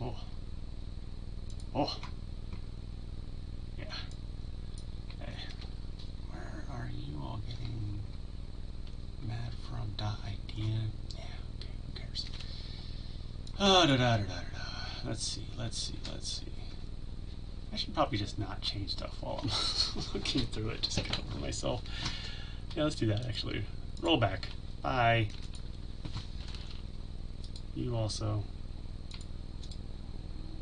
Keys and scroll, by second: 26.3 ctrl+alt+z.